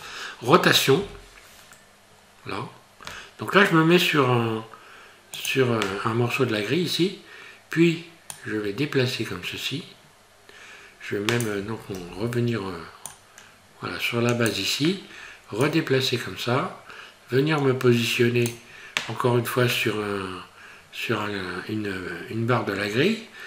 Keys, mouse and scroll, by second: 1.0 r, 8.3 click, 12.0 ctrl+z, 13.1 click, 15.6 click.